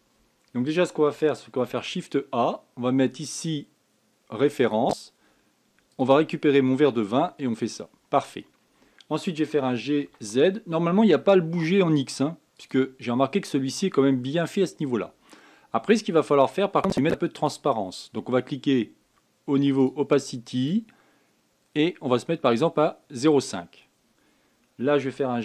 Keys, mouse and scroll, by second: 8.1-8.6 scroll down 3, 13.2-16.7 scroll up 9, 16.7-18.0 drag, 20.2 click, 21.1-24.1 drag.